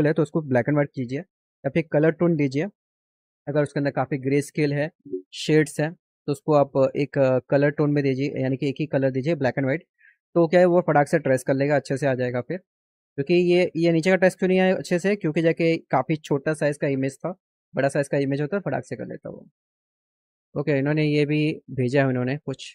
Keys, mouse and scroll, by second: 19.4 click, 20.2 click.